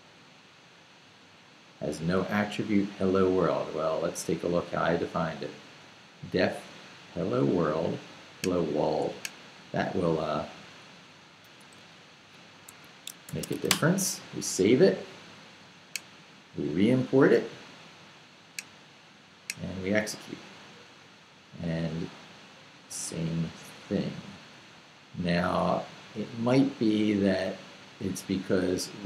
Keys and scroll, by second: 11.4 i, 11.7 r, 12.7 Escape, 13.0-14.0 typing.